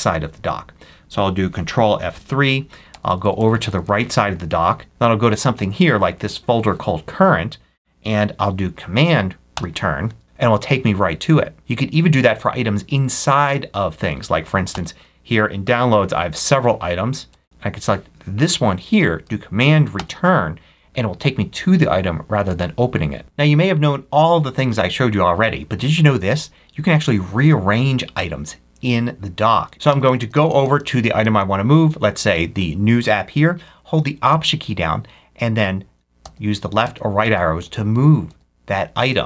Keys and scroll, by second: 1.8 ctrl+F3, 2.8 ctrl+Right, 3.6 Right, 4.8 Left, 9.4 super+Return, 11.6 ctrl+F3, 12.7 Right, 14.6 Up, 17.2 Up, 17.4 Down, 17.6 Up, 19.9 super+Return, 29.8 Left, 36.1 alt+Left, 36.7 alt+Left, 37.5 alt+Right, 38.2 alt+Right, 39.0 alt+Right.